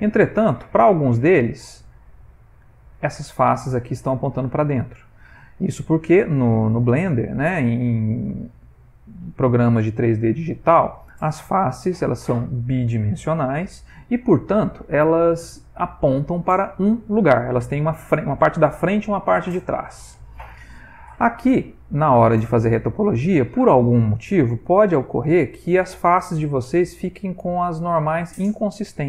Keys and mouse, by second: 0.5 middle click, 1.8 middle click, 3.3 click, 5.2 middle click, 21.1 middle click, 22.6 middle click, 25.1 middle click, 25.6 click, 27.0 click, 27.4 click, 27.9 click, 28.4 click, 28.9 click.